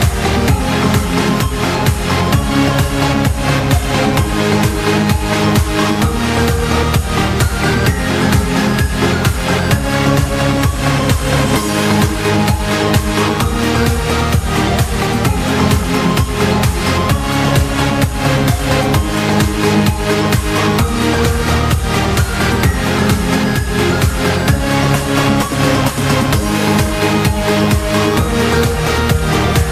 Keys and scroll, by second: 0.4 g, 1.3 ctrl+s, 2.3 ctrl+g, 2.4 ctrl+s, 4.7 v, 5.4 ctrl+shift+p, 9.1 ctrl+s, 10.0 g, 10.7 s, 14.3 z, 19.4 z, 21.6 s, 22.3 p, 23.5 v, 24.9 z, 25.1 ctrl+s, 26.2 v, 28.1 j.